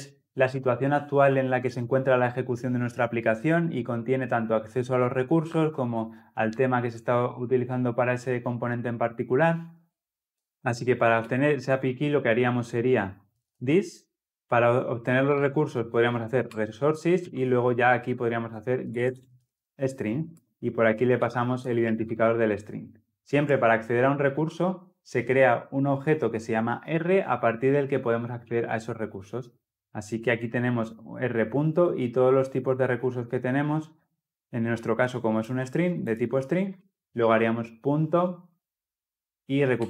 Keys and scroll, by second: 16.4 Return, 39.7 Return.